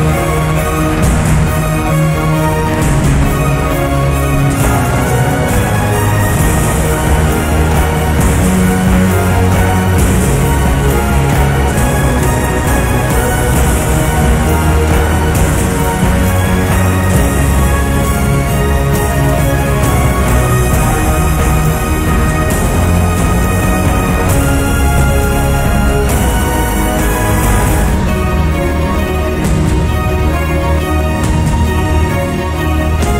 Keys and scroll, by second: 3.1 8, 3.5 Return, 5.9 BackSpace, 6.7 5, 7.0 Return, 13.2-14.0 typing.